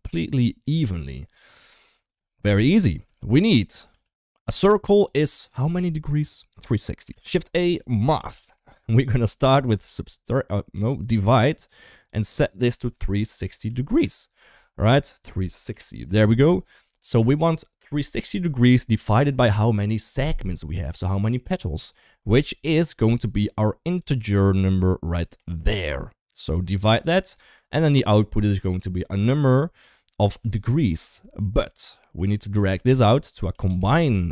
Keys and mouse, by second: 2.9 middle click, 3.4 click, 3.7 g, 4.8 click, 6.9 shift+a, 9.3-11.4 drag, 11.9-13.8 drag, 14.7-15.9 drag, 17.1 click, 22.4 middle click, 22.9 middle click, 23.8-26.3 drag, 26.8 click, 27.0 click, 27.5 middle click, 32.4-34.3 drag.